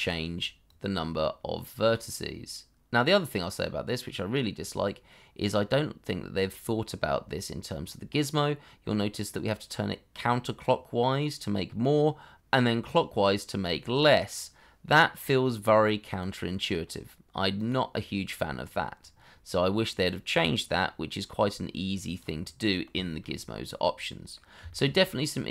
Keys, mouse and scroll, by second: 22.6 middle click, 23.0 shift+middle click, 23.7-24.0 scroll down 1, 24.1 middle click, 24.7 shift+middle click, 25.0-25.3 scroll up 1, 25.3 middle click.